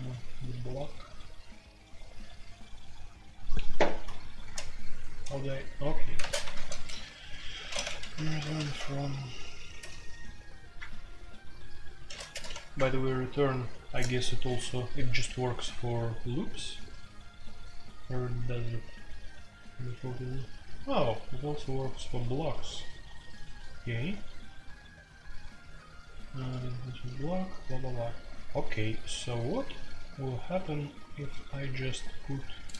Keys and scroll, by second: 4.4 ctrl+t, 6.1-8.6 typing, 9.8 Return, 9.8 ctrl+n, 9.8 BackSpace, 11.3 ctrl+p, 12.3 ctrl+n, 12.7 Return.